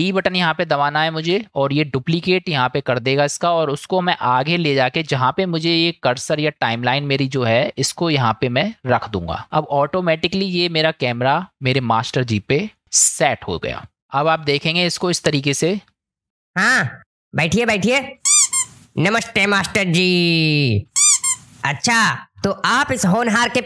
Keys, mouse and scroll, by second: 1.1 shift+d, 9.1 click, 15.2-16.2 drag, 16.2 space.